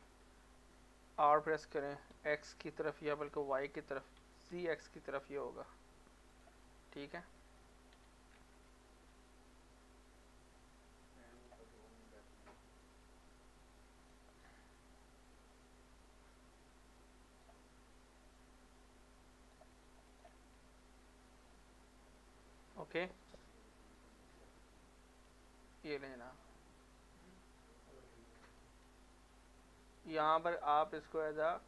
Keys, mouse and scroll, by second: 1.2 r, 2.1 x, 3.3-4.5 typing, 6.3 click, 6.6-7.9 middle drag, 7.9 g, 11.4 g, 11.7 middle click, 12.8-14.5 drag, 14.5 middle click, 15.2-18.4 drag, 18.4-20.1 drag, 20.4 middle click, 22.8 scroll up 1, 23.3 middle click, 24.5-24.9 scroll up 1, 24.9 middle click, 25.0 middle click, 25.3 Tab, 26.0 scroll down 1, 26.4 middle click, 28.5 z, 30.5 click.